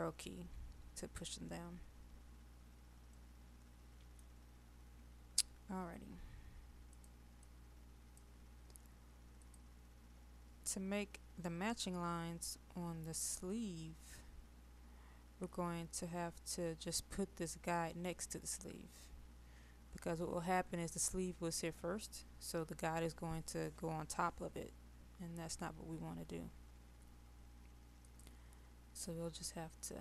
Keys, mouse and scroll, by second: 3.2 middle click, 6.9 click, 29.9 middle click.